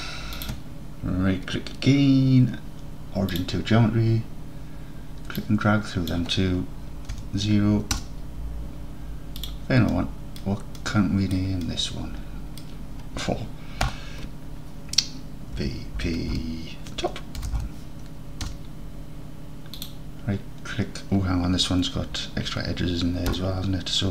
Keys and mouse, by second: 5.6-8.7 drag, 9.4-10.2 drag, 10.2 middle drag, 10.3 middle click, 10.8 middle drag, 11.4 middle drag, 11.7 middle drag, 12.1 middle drag, 12.2 middle click, 12.4-12.7 middle drag, 13.9 F2, 20.0-22.3 drag, 23.4 Tab.